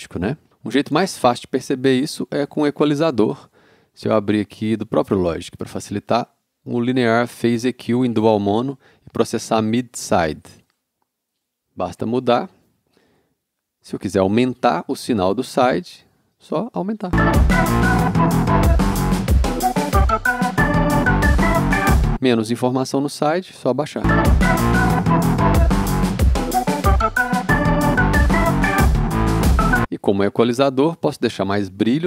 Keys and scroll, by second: 17.1 space, 22.0 space, 24.0 space, 29.7 space.